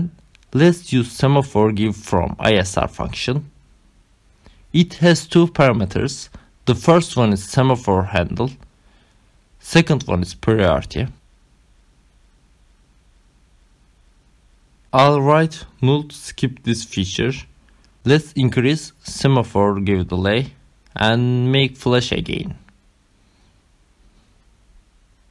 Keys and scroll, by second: 0.0-0.7 typing, 6.8-14.1 typing, 14.6 ctrl+alt+0, 15.3 Left, 15.5 Return, 19.3 5, 19.5 ctrl+s, 21.3 Up, 21.6 Return.